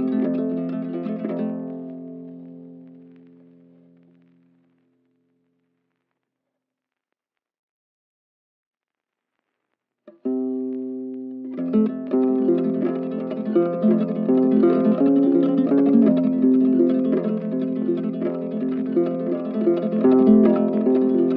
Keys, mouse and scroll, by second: 2.7 right click, 10.1 alt+click, 11.9 alt+click, 13.2 alt+click, 14.1 alt+click, 15.4 alt+click, 16.5 shift+click, 17.1 ctrl+z, 17.5 alt+click.